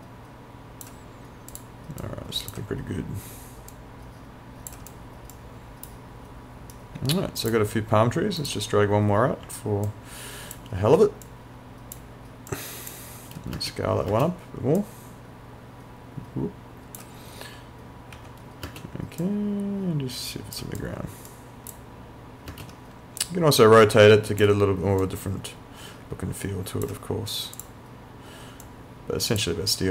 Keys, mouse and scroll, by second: 5.4 right click, 5.9 click, 6.8 right click, 7.5 click, 9.9 alt+click, 11.3 click, 13.6 space, 14.8 click, 17.4 w, 18.7 space, 19.2 click, 21.3 right click, 21.7 click, 22.5 space, 23.6 click.